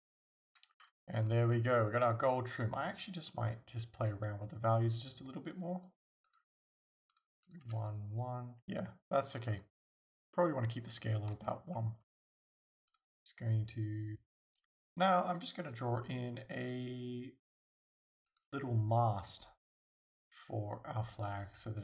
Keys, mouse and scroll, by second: 0.8 scroll down 1, 1.2 scroll up 1, 7.5 click, 9.4 click, 9.4-9.8 scroll up 1, 9.8 scroll down 1, 10.4-12.0 shift+middle drag, 11.5-12.3 scroll up 3, 12.9 click, 14.1-16.6 shift+middle drag, 16.6 click, 18.3 click.